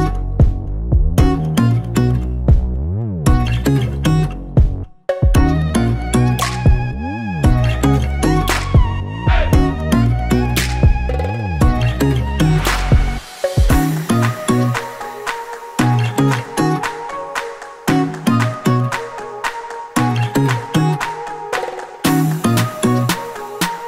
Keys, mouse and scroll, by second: 0.0 scroll down 1, 0.4 shift+d, 2.1 click, 2.6-4.5 middle drag, 3.4 KP_3, 4.0 KP_Decimal, 4.5 click, 4.7 click, 5.2 r, 6.4 KP_Enter, 6.8-8.2 middle drag, 8.2 click, 8.7 r, 9.1 KP_Enter, 9.5-12.6 middle drag, 9.8 shift+z, 10.2 scroll down 1, 11.6 scroll down 1, 13.0 shift+click, 13.5 g, 16.3 click, 16.5-21.6 middle drag, 16.8 scroll down 1, 18.0 ctrl+s, 20.6 scroll up 1, 21.6 click, 21.8 scroll up 1, 21.9 middle click, 22.6 shift+right click, 22.8-23.8 middle drag.